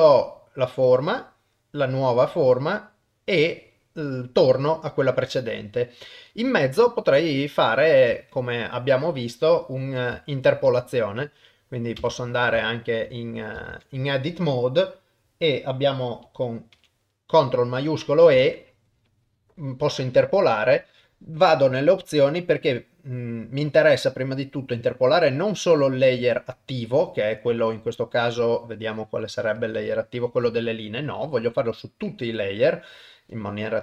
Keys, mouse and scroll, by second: 6.7 shift+middle click, 7.3 middle click, 8.2 shift+middle click, 11.2 middle click, 12.0 Tab, 12.6 shift+middle click, 13.7 alt+a, 16.8 ctrl+shift+e, 21.7-24.7 drag, 29.6 click, 31.0-32.3 drag.